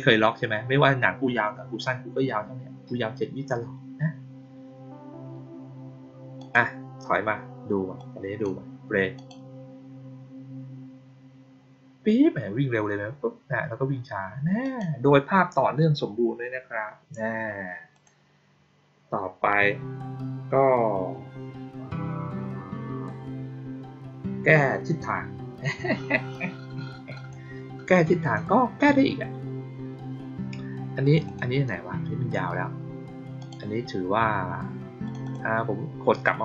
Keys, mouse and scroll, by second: 6.3 click, 7.9-8.3 drag, 9.1 click, 14.5 click, 17.8 click, 27.0 click, 28.1 click, 30.9 click, 31.2 click, 33.3 click, 35.0 click, 35.1 click.